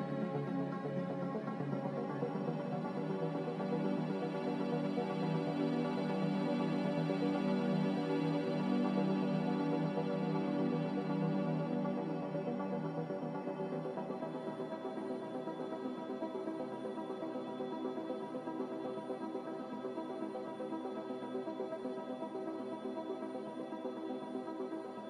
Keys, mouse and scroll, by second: 0.7 ctrl+z, 1.6 ctrl+z, 12.5 Delete, 15.0 Delete, 16.3 m.